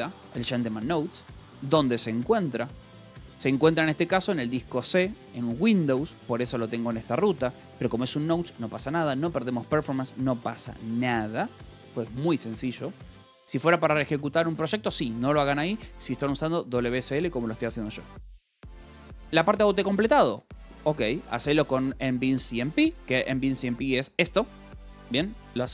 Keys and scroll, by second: 1.2 Escape, 1.2 j, 2.0 shift+v, 3.7 Escape, 6.2 l, 7.4 v, 8.0 e, 9.1 Escape, 12.6-13.5 typing, 18.7 j, 19.0 j, 20.0 Escape, 20.1 k, 21.3 shift+v, 22.1 Escape, 22.7 o, 23.3 a.